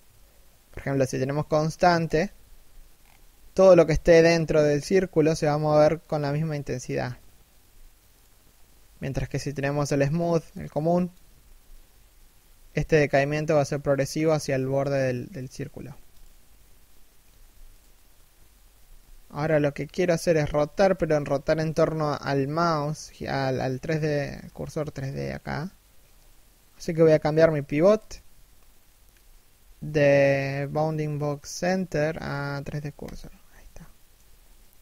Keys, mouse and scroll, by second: 1.9 g, 10.9 g, 16.8 g, 18.3 r, 22.8 middle click, 23.4 1, 23.6 scroll up 1, 25.5-26.4 scroll down 1, 32.9-33.3 scroll down 1, 33.3 shift+middle click, 33.9-34.4 scroll down 1, 34.4 r.